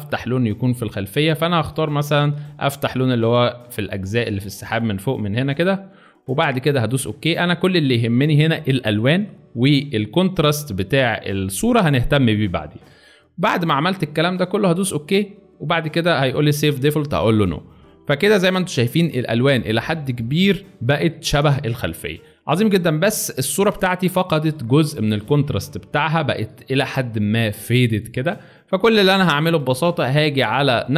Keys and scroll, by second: 23.1 space, 23.8 alt+space, 24.4 alt+space, 26.2 space, 26.9 alt+space, 27.7 alt+space.